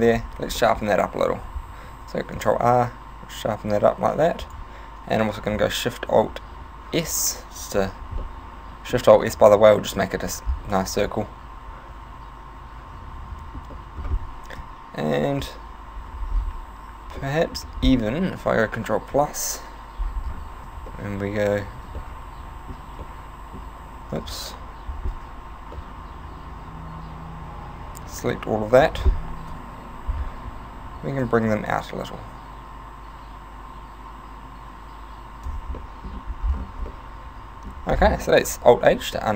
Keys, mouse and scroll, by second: 0.1 Tab, 0.1 scroll up 3, 0.7 middle click, 1.0 scroll up 1, 1.9 ctrl+r, 4.5 click, 5.4 alt+shift+s, 7.8 click, 8.3 middle click, 9.3 middle click, 10.5-10.8 scroll down 5, 11.0 Tab, 11.2 middle click, 13.8 middle click, 14.6 KP_3, 15.1 KP_1, 15.7 Tab, 16.3 scroll up 6, 17.3 middle click, 18.4 ctrl+KP_Add, 19.1 KP_3, 20.3 scroll down 3, 20.7 b, 21.8 b, 22.9 b, 24.3 ctrl+z, 25.1 c, 29.0 right click, 29.5 KP_1, 31.2 click, 35.9 middle click, 36.5 scroll down 4, 36.7 Tab, 36.9 middle click, 38.1 scroll down 2, 38.5 alt+h, 39.0 a, 39.2 middle click.